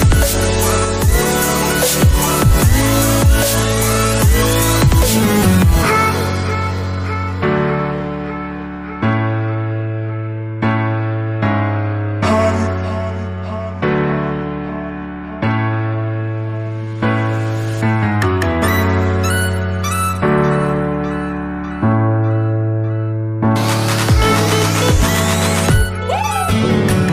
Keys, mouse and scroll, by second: 0.1 alt+Tab, 0.8 Escape, 6.6 double click, 7.5 typing, 7.8 Return, 13.4 double click, 17.0 double click, 17.8 1, 18.4 Return, 20.7 middle click, 26.4 middle click.